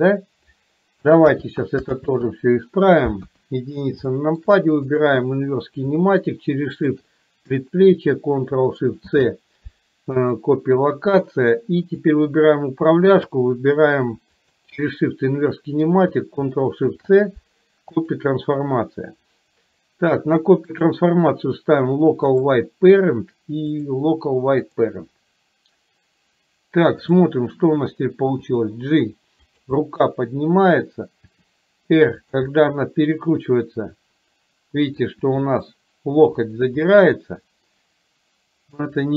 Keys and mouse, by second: 1.4 ctrl+z, 2.0 ctrl+z, 3.2 KP_1, 4.2 shift+middle drag, 5.0 click, 13.2 shift+click, 21.0-22.6 drag, 23.9-25.0 drag, 27.2 click, 28.6 g, 29.9-31.0 middle drag, 31.4 r, 32.5-35.2 middle drag, 35.4 r, 37.0-39.0 middle drag.